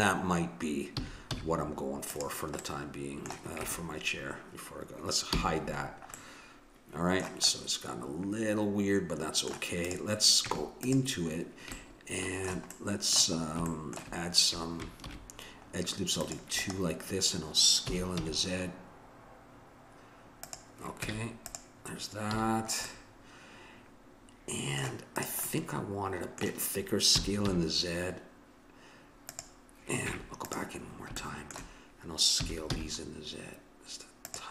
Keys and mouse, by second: 0.9 a, 1.3 z, 2.8-4.5 middle drag, 3.7 Tab, 5.3 h, 5.8 middle click, 6.2-8.4 middle drag, 9.9-12.1 drag, 10.5 Tab, 15.1 ctrl+r, 17.9 s, 21.1 Tab, 22.3 a, 22.5-23.9 middle drag, 24.1 middle click, 25.2-26.7 drag, 26.7 middle click, 27.1 s, 30.0 Tab, 30.9-33.3 middle drag, 32.4 s.